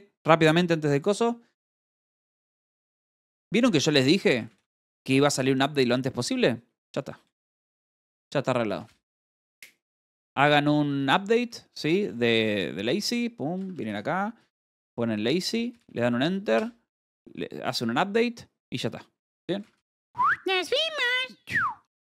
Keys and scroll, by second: 2.7-3.5 typing, 6.8 Return, 7.6-9.8 typing, 12.3-13.6 typing, 15.1 i, 15.4 Return, 16.3-17.1 typing, 18.1 Tab, 19.0 shift+u.